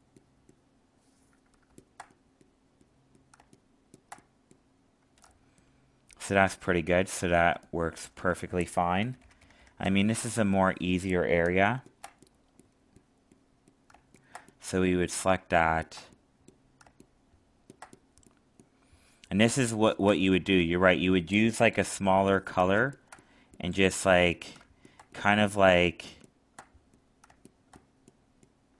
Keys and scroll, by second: 5.2 alt+space.